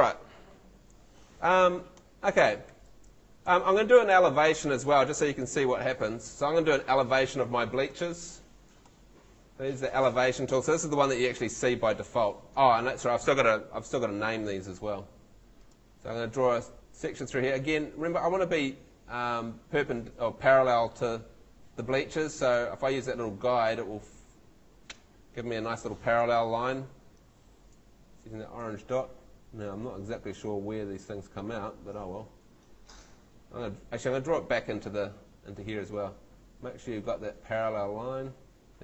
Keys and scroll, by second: 2.1 F2, 2.7 F3, 3.5 F2, 4.1 Escape.